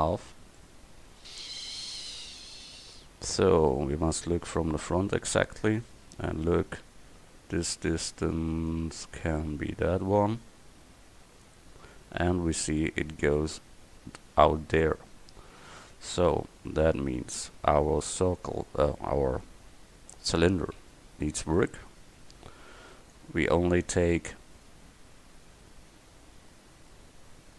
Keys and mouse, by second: 1.0 middle click, 2.2 KP_4, 4.4 KP_1, 8.7-11.5 drag, 16.9 Tab, 17.6 a, 20.8 c.